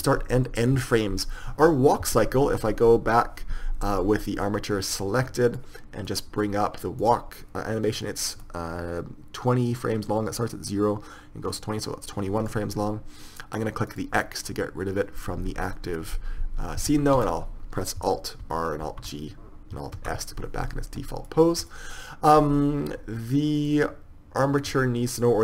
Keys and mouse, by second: 7.6 click, 14.4-15.5 drag, 16.1-18.9 middle drag, 17.5 a, 17.6 a, 18.9 alt+r, 19.3 alt+g, 20.4 alt+s, 25.2 click.